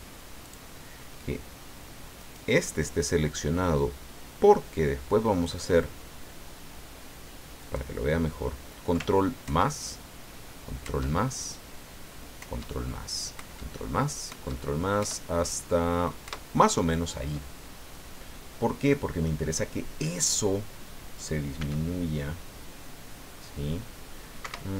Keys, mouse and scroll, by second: 0.4 click, 2.2 right click, 3.2-3.8 scroll down 2, 7.6 click, 9.4 ctrl+KP_Add, 10.8 ctrl+KP_Add, 12.4 ctrl+KP_Add, 13.3 ctrl+KP_Add, 14.3 ctrl+KP_Add, 15.0 ctrl+KP_Add, 16.2 ctrl+KP_Add, 17.5-17.9 ctrl+scroll down 3, 17.9-19.4 drag, 21.6 s, 24.4 Escape.